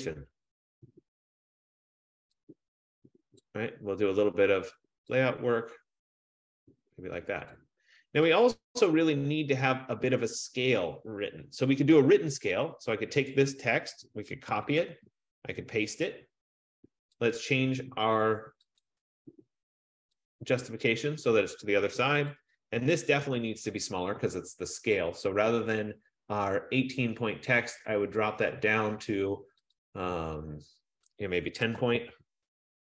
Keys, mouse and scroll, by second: 3.7 click, 7.7 click, 8.7 click, 13.4 click, 14.6 ctrl+c, 15.1 ctrl+v, 17.2 click, 19.1 click, 20.4 click, 22.6 click, 22.9 click, 23.4 ctrl+a, 24.2 F15, 29.9 click, 31.2 click, 31.5-32.8 typing.